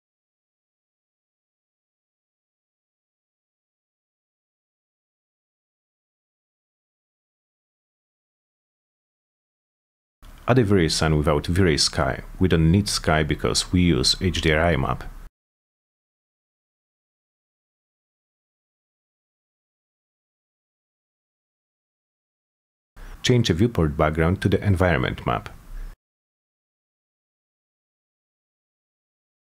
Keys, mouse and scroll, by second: 1.1 t, 1.8 z, 3.8 click, 5.1 click, 6.3 click, 7.6 click, 8.1 middle click, 9.1 middle click, 9.2 F4, 9.4 middle click, 10.1 middle click, 10.5 middle click, 11.6-12.9 drag, 13.9 click, 14.8 right click, 15.1 middle click, 15.6 middle click, 16.2 click, 17.3 click, 18.6 middle click, 19.8 click, 20.6 click, 22.1 click, 25.3 click, 25.7 click, 27.2 click.